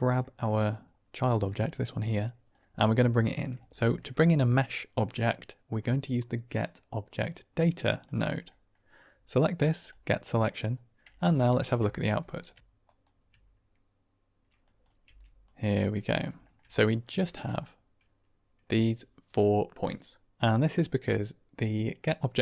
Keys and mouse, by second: 0.1 shift+middle drag, 1.4-1.8 middle drag, 1.8 click, 2.6 click, 3.0 click, 3.5 shift+a, 8.4 click, 9.8 click, 11.5 ctrl+shift+click, 12.8 ctrl+right click, 14.6 drag, 14.9 g, 16.3 shift+drag, 16.7-17.2 drag.